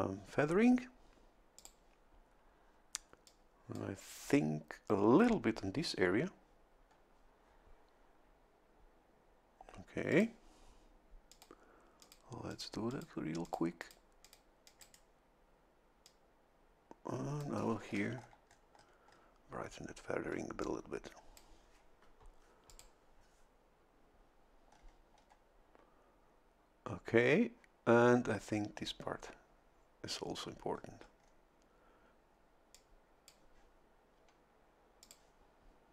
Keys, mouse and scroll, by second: 1.6 click, 3.3-4.3 drag, 10.1 click, 11.3 click, 12.0 click, 12.5 click, 12.9 click, 13.4 click, 13.8 click, 14.2 click, 14.6 click, 14.8 right click, 16.0-17.6 drag, 18.2 shift+scroll up 2, 20.6-22.0 shift+drag, 22.7 click, 24.7-25.4 scroll down 2, 30.7-31.4 scroll up 1, 32.7-33.9 drag, 35.0 click.